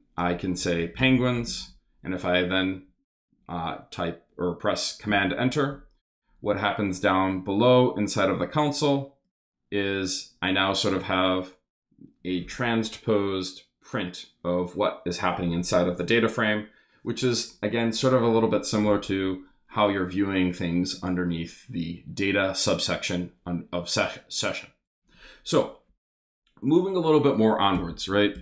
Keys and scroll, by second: 0.3-2.0 typing, 2.2 super+s, 5.0 super+Return, 27.7 Return, 28.1 Up, 28.3 Return.